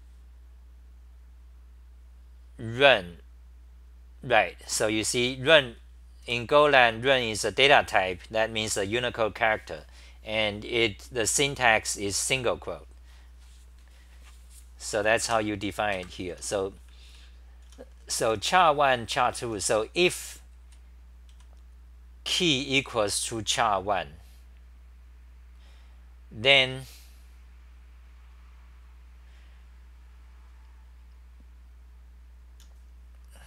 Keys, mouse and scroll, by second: 15.0 Home, 15.0 c, 15.3 2, 15.9 ctrl+g, 16.3 t, 17.4-21.3 typing, 22.4 r, 22.9 r, 23.1 r.